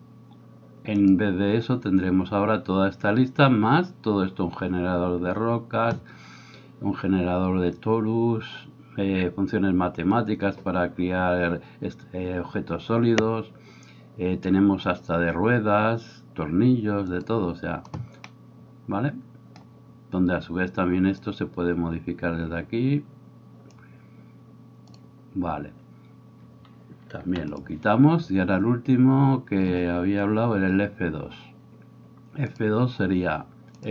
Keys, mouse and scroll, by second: 0.0-33.9 drag, 18.3-19.3 middle drag, 23.1 middle click, 23.8-24.9 middle drag, 27.2 x.